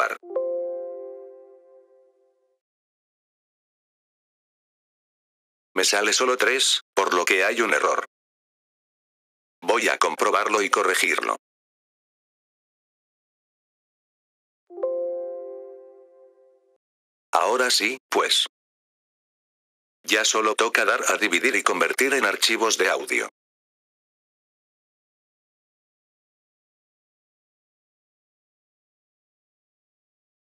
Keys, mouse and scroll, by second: 0.0 click, 4.1 click, 4.6 F4, 5.6-7.4 drag, 7.9-9.7 drag, 13.2 click, 14.5 click, 16.1 click, 16.7 F4, 17.2-19.0 drag, 19.1-20.2 drag, 23.4 click, 25.0 click.